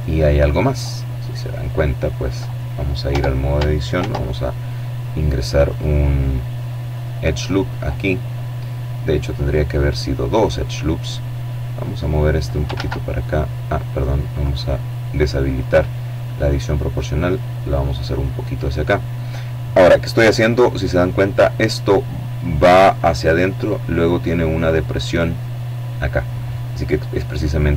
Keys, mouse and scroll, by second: 2.0 Tab, 2.8 ctrl+r, 4.6 click, 5.8 click, 10.7-11.9 drag, 11.6 ctrl+z, 13.3 click, 14.4 click, 15.3-18.2 drag, 18.9 KP_7.